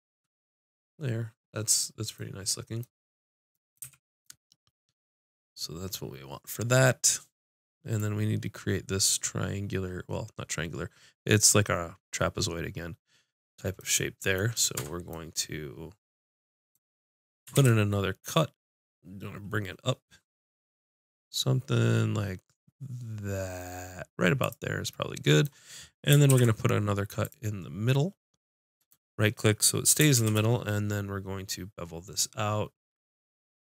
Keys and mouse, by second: 3.8 a, 9.7-13.4 middle drag, 13.5 middle click, 14.7 Tab, 17.5 ctrl+r, 26.2 ctrl+r, 30.1 ctrl+b.